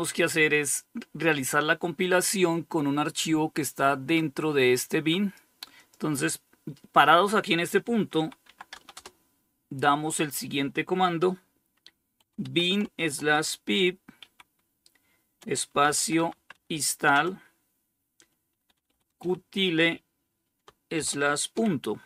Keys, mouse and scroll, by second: 3.4-5.1 drag, 7.1-8.4 typing, 11.2-16.4 typing, 17.5-18.9 typing, 20.2-20.8 typing.